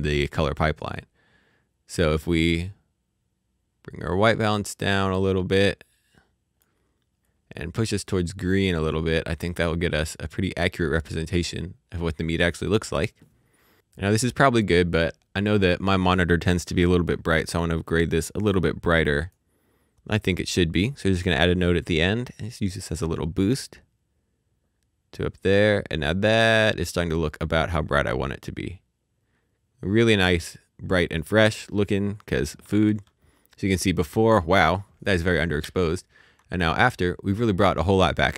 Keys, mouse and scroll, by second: 1.4 click, 7.2 z, 7.3 click, 16.4 click, 17.8 click, 22.7 click, 32.6 click.